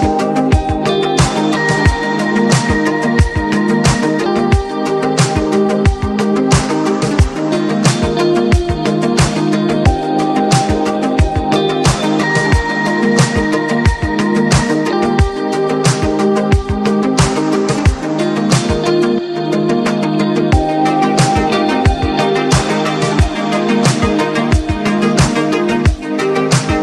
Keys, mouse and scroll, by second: 0.0-9.9 drag, 10.0-11.8 drag, 14.4 click, 18.8 click, 21.4 click, 25.4 click, 25.4 click.